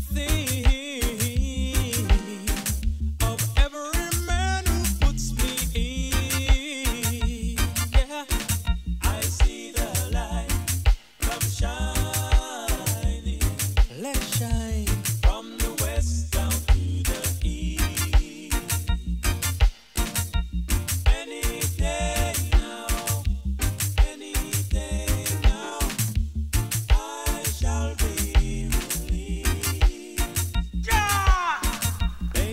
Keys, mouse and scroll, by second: 0.0-0.4 scroll down 4, 0.3 shift+middle click, 0.8 a, 0.9 a, 1.9 alt+g, 2.0 alt+r, 3.4 ctrl+Tab, 4.5 a, 6.0 click, 18.1 click.